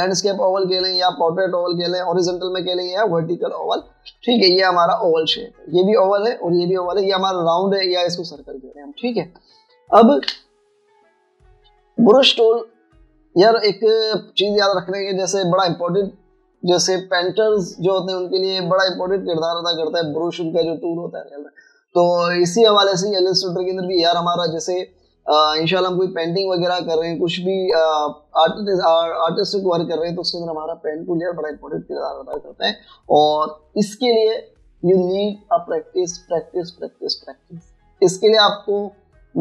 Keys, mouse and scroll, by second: 5.0 v, 11.2 v.